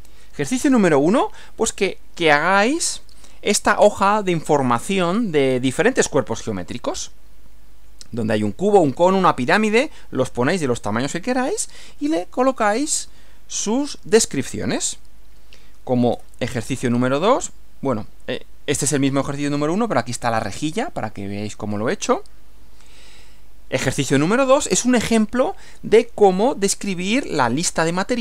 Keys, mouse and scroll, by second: 16.1 Right, 23.2 Right.